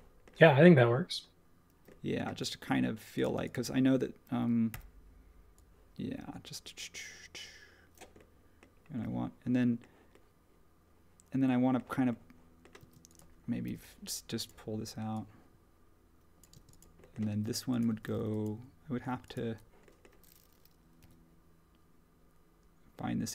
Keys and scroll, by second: 3.2 space, 4.7 p, 12.8 space, 13.6 p, 17.3 space.